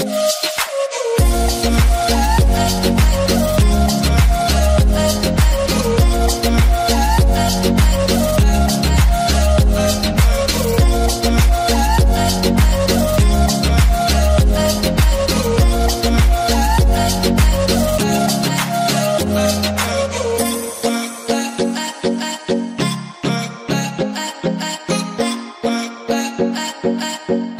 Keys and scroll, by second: 7.5-9.4 typing, 9.8 Return, 11.3-12.1 typing, 17.9 d, 19.6-20.4 typing, 27.2 l.